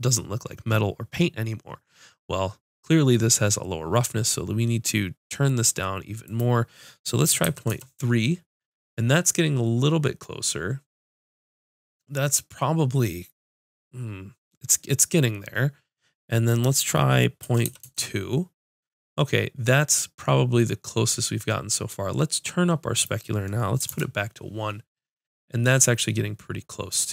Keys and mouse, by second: 6.3-8.1 drag, 16.7-25.2 drag.